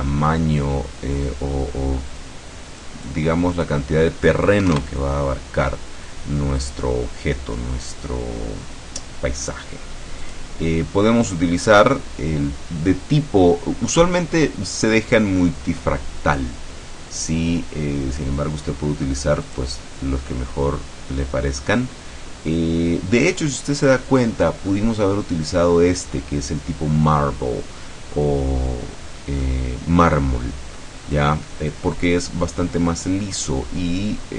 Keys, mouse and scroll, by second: 1.0 scroll down 1, 1.2-1.8 scroll up 1, 2.9 click, 3.6 click, 4.7 KP_2, 10.3 click, 19.5 click, 22.6-24.9 middle drag, 25.0-25.5 scroll up 1, 25.5-29.5 scroll down 1, 29.5-31.0 middle drag, 31.0-31.5 scroll up 1, 31.5-34.3 middle drag.